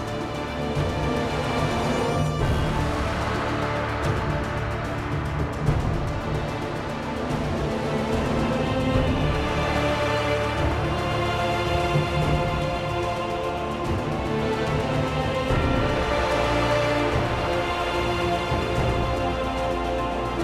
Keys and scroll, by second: 2.6 r, 6.4 y, 9.6 g, 17.5 r.